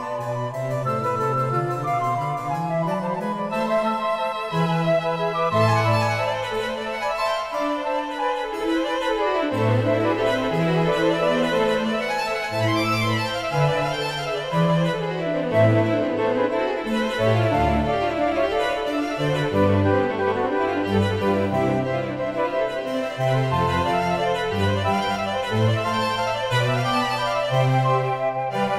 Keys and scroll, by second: 22.5 1.